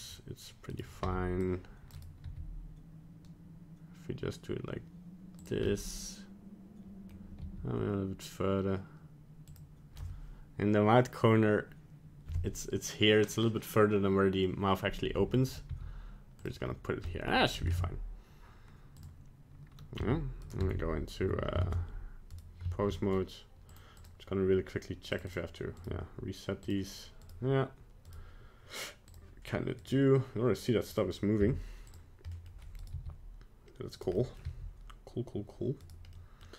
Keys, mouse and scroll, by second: 0.7 right click, 1.0 c, 2.2 g, 5.7 middle click, 7.4 g, 15.7 g, 16.6-17.1 scroll down 1, 17.1 middle click, 17.2 middle click, 17.7 ctrl+Tab, 20.0 z, 20.6 Tab, 21.2 Tab, 22.3 right click, 23.7 click, 24.0 click, 25.1 click, 25.3 click, 25.8 right click, 26.6 click, 27.2 right click, 28.1 right click, 29.1 click, 29.8 right click, 30.9 click, 31.4 z, 32.3 middle click, 32.8 right click, 32.9 g, 34.1 middle click, 34.4 g, 36.2 middle click.